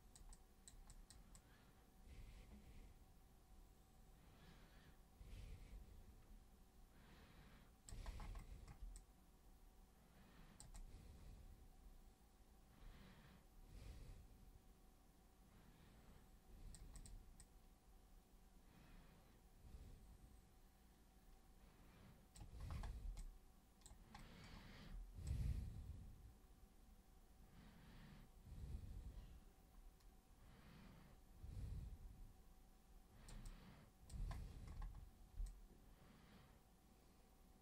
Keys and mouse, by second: 0.3 super+click, 0.9 super+click, 1.3-7.8 super+drag, 8.9-10.5 super+drag, 10.8-16.7 super+drag, 16.9 super+click, 17.4-22.3 super+drag, 23.1 alt+super+click, 25.2-33.3 super+drag, 33.4 super+click, 35.4-37.6 alt+super+drag.